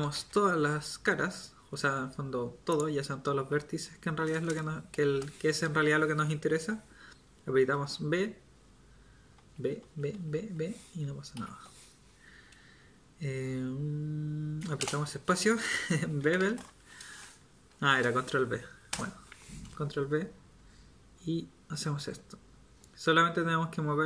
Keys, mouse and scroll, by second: 7.7 b, 14.8 space.